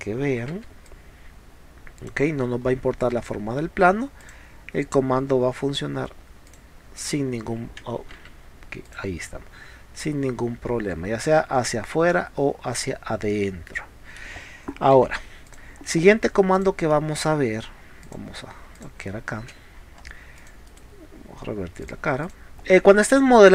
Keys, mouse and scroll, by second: 0.6 e, 0.9-2.1 drag, 2.4 middle click, 2.4 scroll down 1, 3.2 middle click, 3.2 scroll up 1, 4.2 click, 6.5 click, 8.3 ctrl+z, 8.9 click, 12.8 click, 13.4 middle click, 15.1 p, 15.5 click, 15.8 scroll down 1, 16.6 click, 17.0 middle click, 18.1 click, 18.8 click, 19.5 space, 19.8 scroll down 1, 20.0 scroll up 1, 20.4 click, 21.8 click, 22.3 click.